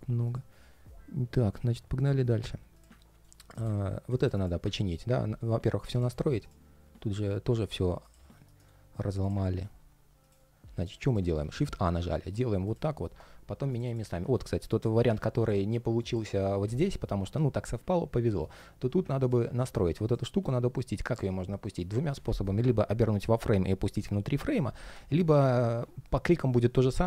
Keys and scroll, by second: 8.2 shift+super+g.